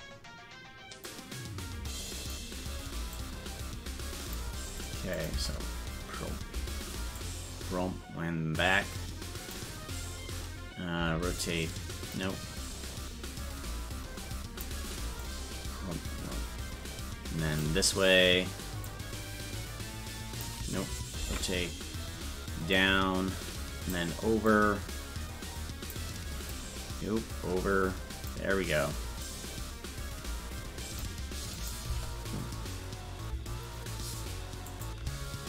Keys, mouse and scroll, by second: 1.0-2.3 drag, 3.1-4.4 drag, 5.2 click, 5.3 space, 7.2-9.5 drag, 7.2 space, 11.2 alt+r, 12.1-14.6 drag, 15.2-17.6 drag, 18.9-20.4 drag, 21.3 alt+r, 22.7-24.0 drag, 24.5-26.0 drag, 26.5-28.3 drag, 29.2-31.1 drag, 31.6 click, 31.9 space, 34.7 click, 35.1 space.